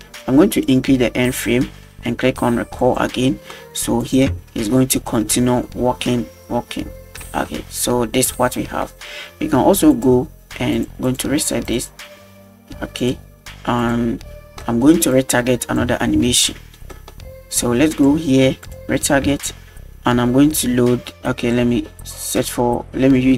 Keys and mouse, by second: 0.7 click, 2.8 click, 4.1 click, 4.3 space, 7.2 space, 9.9 click, 10.7 click, 11.1 click, 11.4 click, 11.7 click, 13.0 click, 13.8 click, 14.6 middle click, 15.2 drag, 16.3 shift+middle click, 16.9 middle drag, 18.7 click, 19.3 shift+middle drag, 22.3 click.